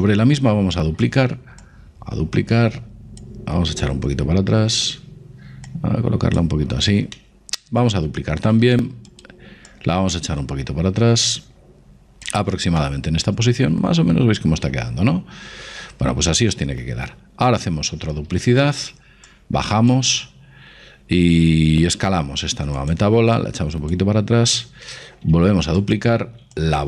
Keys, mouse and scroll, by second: 0.4 shift+d, 1.6-3.5 drag, 3.9-7.3 drag, 7.1-9.0 middle drag, 8.5 shift+d, 9.7-11.6 drag, 12.8-14.7 middle drag, 18.0 shift+d, 19.3-21.1 drag, 21.9 s, 23.4-25.2 drag, 25.3 shift+d, 26.6-26.8 drag.